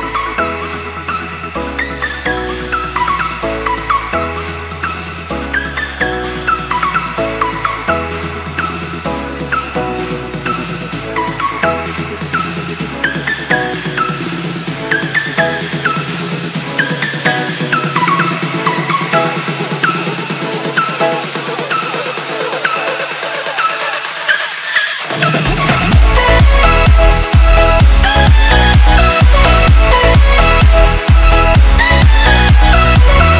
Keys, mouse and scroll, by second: 8.8 click, 9.9 ctrl+c, 10.2 alt+Tab, 11.8 click, 13.2 click, 14.0 Return, 19.9 ctrl+Num_Lock, 20.2 s, 21.5 click, 27.3 z, 28.2 ctrl+s, 29.3 click, 32.8 Delete.